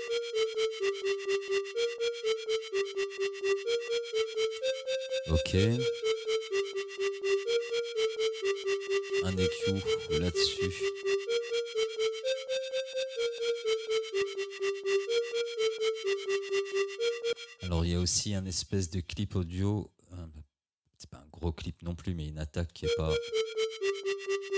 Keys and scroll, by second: 17.4 space, 22.9 space.